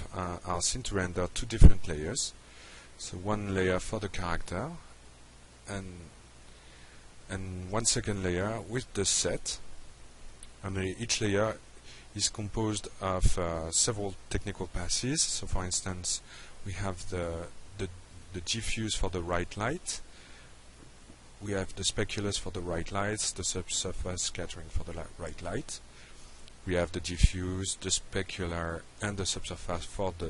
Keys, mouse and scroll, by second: 0.5 click, 1.5 click, 2.1 click, 3.5 click, 6.0 click, 9.1-9.7 drag, 11.8 click, 18.8 click, 21.2 click, 22.9 click, 25.2-25.8 drag, 27.4 click.